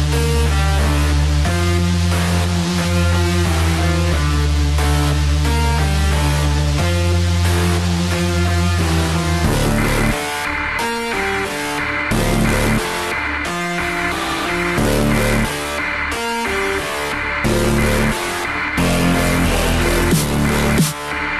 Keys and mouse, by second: 0.2 KP_1, 4.5 alt+click, 5.9 g, 7.1 click, 8.5 s, 12.4 click, 13.8 click, 17.8 alt+click, 19.1 ctrl+x, 21.2 z.